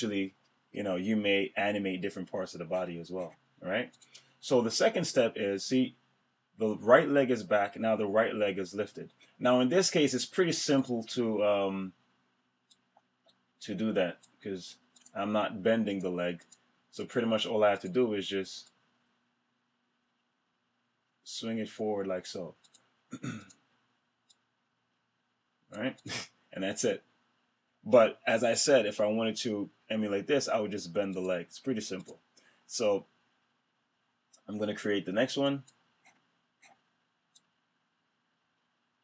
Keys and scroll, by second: 0.3 F6.